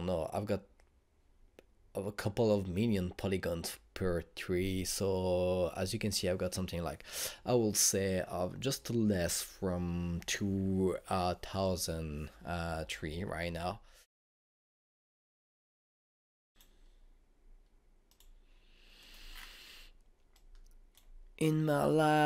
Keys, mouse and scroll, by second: 16.5 click, 17.3 click, 20.1-21.1 scroll down 1, 21.4-22.2 drag.